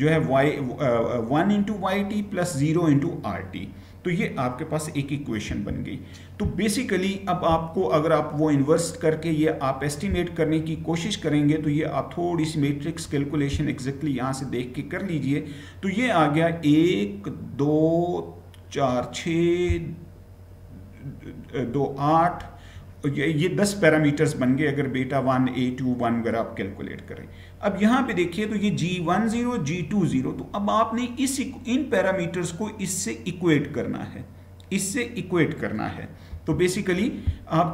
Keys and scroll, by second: 5.5 Right, 36.3 Right.